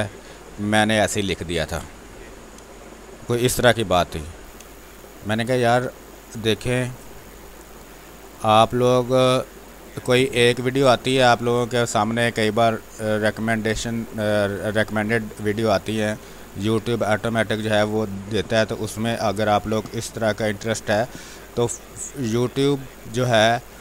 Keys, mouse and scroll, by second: 11.2 space, 11.3-19.7 drag, 19.7 space, 19.9 alt+click, 22.3 click, 22.7 ctrl+space, 23.0 ctrl+click, 23.2 ctrl+space.